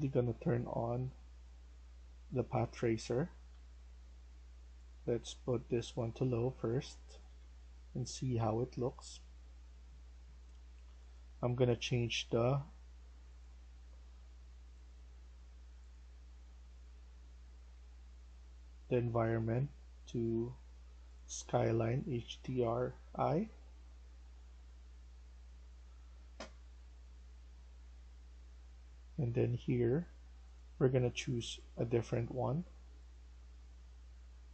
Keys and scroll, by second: 0.0-0.5 typing, 2.9 d, 6.2-8.4 typing.